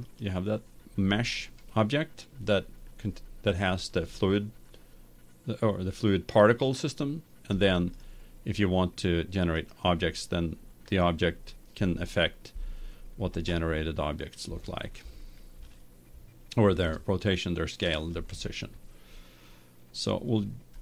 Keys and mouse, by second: 0.2-1.9 right drag, 1.9-3.3 middle drag, 8.1-11.3 right drag, 11.3-12.9 drag, 12.9 right click.